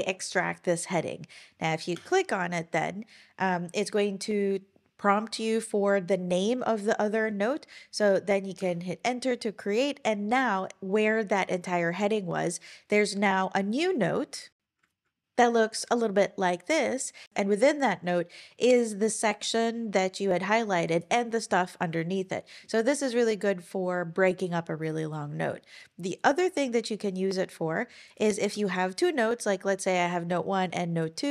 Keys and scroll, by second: 1.9 Return, 8.6 Return.